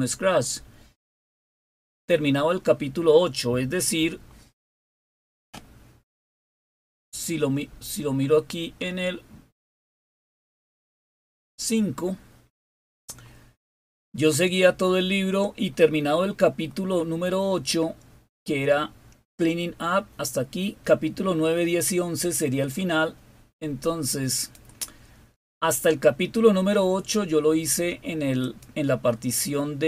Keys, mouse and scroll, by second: 10.7 click, 12.0-13.2 scroll down 5, 13.7-16.2 scroll down 11, 16.6-17.1 scroll down 4, 17.6 scroll down 1, 20.5-21.2 scroll down 2, 24.2 click, 28.3 click, 28.9 click.